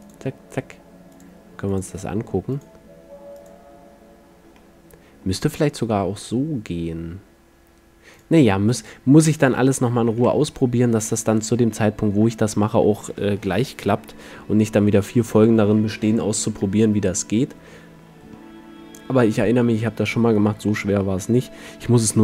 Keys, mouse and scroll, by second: 4.7-5.0 middle drag, 7.0-7.8 middle drag, 8.2 click, 10.3 a, 12.0-13.8 middle drag, 14.4-16.3 middle drag, 16.8-20.4 middle drag, 20.7-22.2 middle drag.